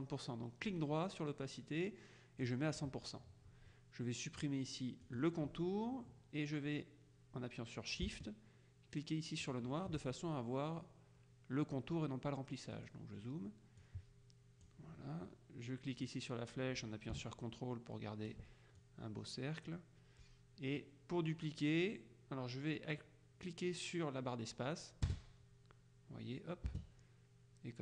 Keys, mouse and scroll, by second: 0.8 right click, 2.5 click, 5.1 click, 9.5 shift+click, 12.9 click, 13.9-15.3 drag, 16.1-18.9 drag, 25.1 space, 26.8 space.